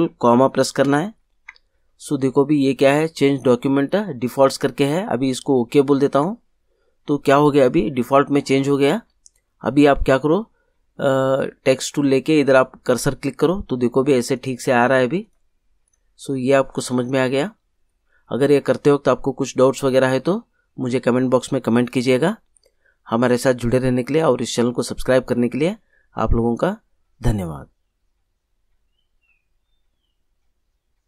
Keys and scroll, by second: 0.8 ctrl+,.